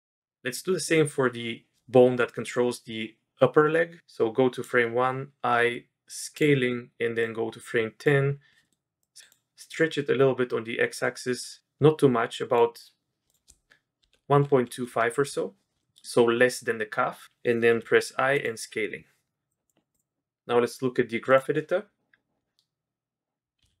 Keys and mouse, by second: 2.2 middle drag, 4.0 click, 6.5 i, 7.2-8.0 drag, 8.6 middle click, 9.0 click, 9.7 click, 13.3-15.4 drag, 15.8 middle drag, 17.7 i, 19.5-22.5 drag.